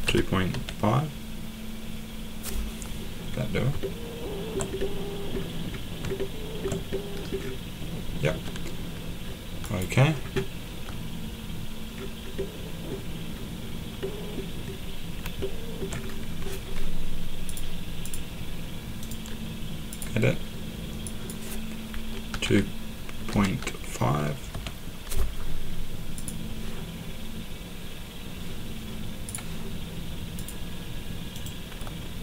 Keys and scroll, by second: 0.0-1.0 typing, 22.3-24.5 typing.